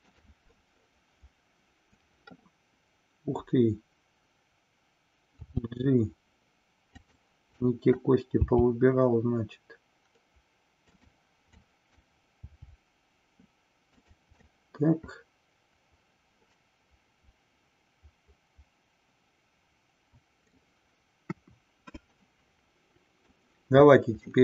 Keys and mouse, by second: 7.0 click, 7.6 click, 11.5-12.0 drag, 14.0 click, 14.5-20.5 middle drag, 21.2 KP_1, 22.4-23.4 middle drag, 24.3-24.4 middle drag.